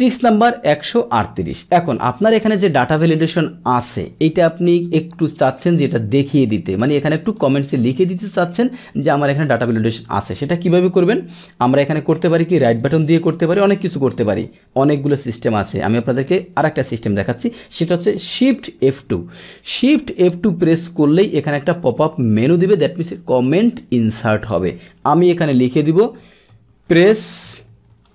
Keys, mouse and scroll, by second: 2.5 click, 4.8-5.9 drag, 6.8 click, 7.7 click, 10.0 click, 12.8 right click, 13.7 click, 14.3 click, 16.1 click, 18.8 shift+F2.